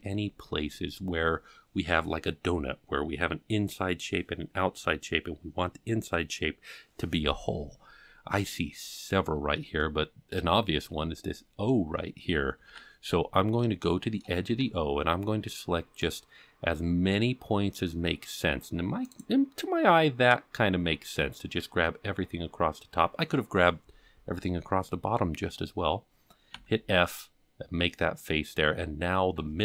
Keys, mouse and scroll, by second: 0.7-1.6 scroll down 2, 9.8 shift+middle click, 10.8-11.2 scroll up 4, 12.7 alt+a, 13.0-13.4 scroll up 4, 13.9 shift+middle click, 14.5 c, 24.2-24.8 scroll down 1, 26.6 f.